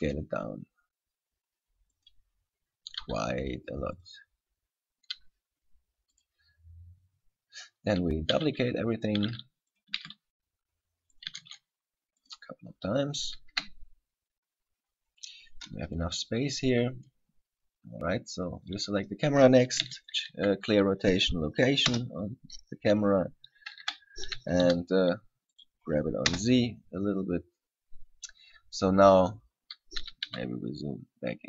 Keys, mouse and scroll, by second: 0.0 s, 2.2 click, 2.4-3.1 scroll up 7, 3.2 s, 4.2 click, 4.5-4.8 scroll down 3, 5.4 s, 6.4 click, 6.7-7.3 scroll down 7, 7.3-8.0 scroll up 9, 8.6 shift+d, 9.3 click, 9.5 shift+d, 10.0 click, 10.3 shift+d, 11.4 click, 11.6 shift+d, 12.4 click, 12.8-13.2 scroll down 3, 13.2-13.6 scroll up 2, 13.7 KP_3, 14.5-14.8 scroll down 3, 15.6 scroll up 1, 17.6-18.8 scroll down 8, 18.8 right click, 19.2-19.6 scroll up 3, 20.1 alt+r, 20.4 alt+g, 22.1 KP_0, 24.0 KP_3, 24.6 g, 25.8 click, 26.5 KP_0, 30.2 g.